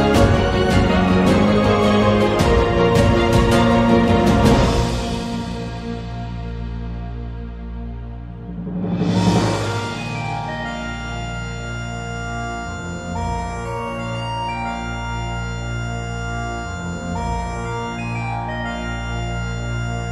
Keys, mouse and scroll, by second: 0.2 click, 1.0-2.1 drag, 2.8 middle click, 3.2 click, 3.6 click, 3.9 Tab, 5.2 Tab, 5.3 a, 5.7 click, 6.0 shift+middle click, 13.5 click, 14.1 z, 17.8 scroll up 1, 17.8 middle click, 18.2 Tab, 18.6 shift+middle click, 19.2 z, 19.5 click, 19.8 z.